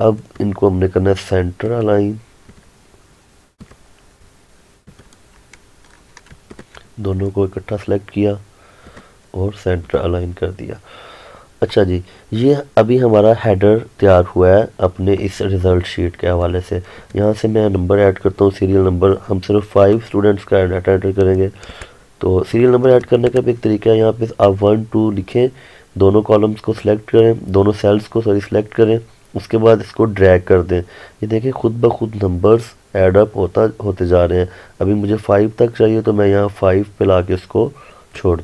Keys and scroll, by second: 6.4 ctrl+Num_Lock, 21.8 Return.